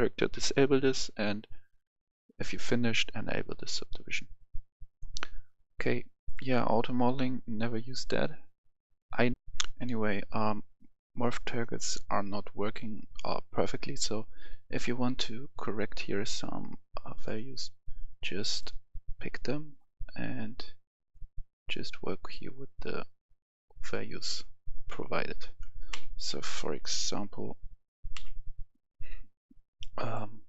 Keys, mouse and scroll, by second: 4.9-8.9 drag, 9.4 F10, 13.8-24.4 drag, 25.9 ctrl+z, 28.1 ctrl+z, 29.6 click.